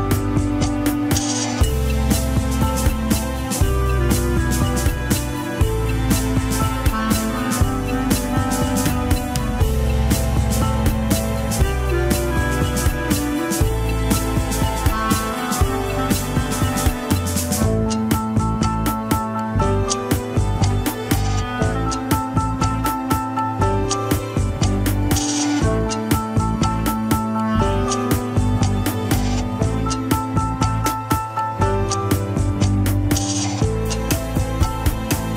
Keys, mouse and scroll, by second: 2.1 alt+z, 2.4 alt+z, 3.6 shift+click, 4.7-5.2 scroll up 2, 5.2 n, 5.6 n, 6.2 click, 6.9 ctrl+Tab, 7.1 scroll up 1, 7.4-8.6 shift+middle drag, 8.6 shift+click, 9.5 click, 10.0 click, 10.5 click, 10.9 scroll down 2, 11.4-12.9 shift+middle drag, 12.9 click, 13.4 Tab, 13.5 s, 14.9-16.1 drag, 16.1 s, 17.2-17.8 scroll up 2, 17.5 shift+middle click, 17.9 s, 18.8 Tab, 18.9 click, 19.2 Tab, 19.5 s, 21.3 KP_3, 21.4 scroll up 1, 21.7 shift+middle click, 22.0-22.7 scroll up 3, 22.2 shift+middle click, 22.7 g, 24.6-26.7 drag, 28.2-28.6 scroll down 1, 28.6 alt+z, 29.4 click, 30.4 x, 33.9 scroll down 2, 34.0 middle click, 34.8 ctrl+z.